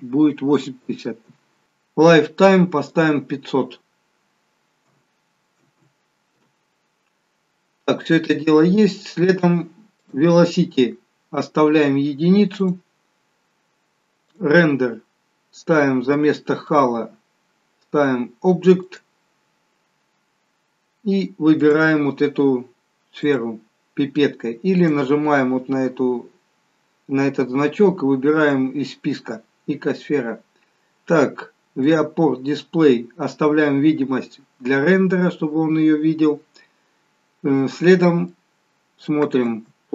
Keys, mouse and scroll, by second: 2.9 click, 5.9 0, 7.9 scroll down 2, 10.1 click, 10.1-10.9 scroll down 1, 11.2 scroll down 1, 12.7 click, 12.7-13.2 scroll down 1, 13.3-14.3 scroll down 1, 14.4 click, 20.0 scroll down 2, 21.7 click, 21.7 scroll down 1, 24.9 click, 29.9 scroll down 1, 31.9 click, 31.9-32.3 scroll down 3, 35.3 scroll up 1, 36.3 scroll up 2, 36.4 scroll down 2, 38.4 middle click, 39.6 space.